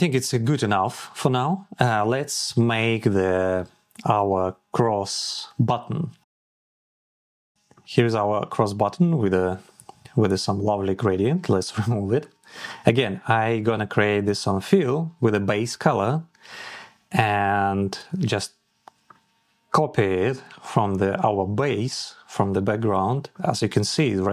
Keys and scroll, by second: 18.0 ctrl+c.